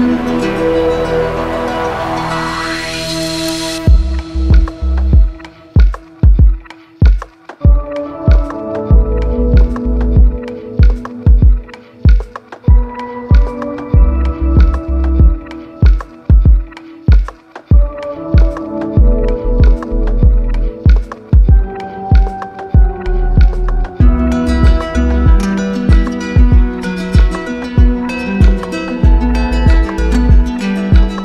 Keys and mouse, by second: 7.6 click, 8.8 click, 10.7 shift+click, 11.7 click, 12.1 click, 12.5 click, 16.7 click, 18.6 click, 21.1 click, 21.9 click, 24.0 click, 25.9 click, 27.7 shift+click, 28.1 ctrl+z, 28.1 click, 29.6 click, 30.0 shift+click.